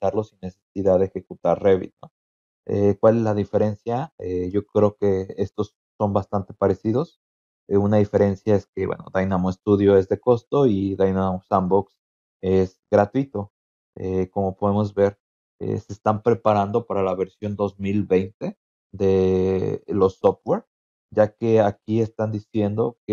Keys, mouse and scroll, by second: 4.5-5.2 scroll down 4, 5.3 scroll up 2, 5.9 scroll down 2, 6.4 scroll up 2, 7.6-7.9 scroll down 2, 9.3-10.0 scroll up 4.